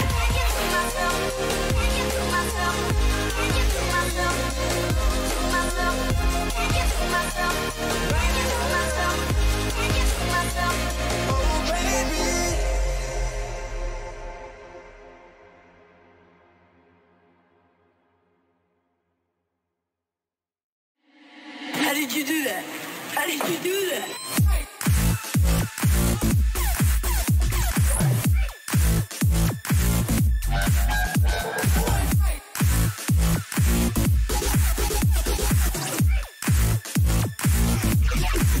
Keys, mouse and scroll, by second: 2.2-4.6 middle drag, 4.6-6.6 right drag, 5.1-7.1 middle drag, 7.1-9.2 drag, 8.6 middle click, 9.2-10.6 middle drag, 15.3-18.3 middle drag, 19.9-21.5 middle drag, 26.2-28.0 middle drag, 28.8-33.0 middle drag, 30.9 ctrl+z, 34.1 a, 35.0-38.6 right drag.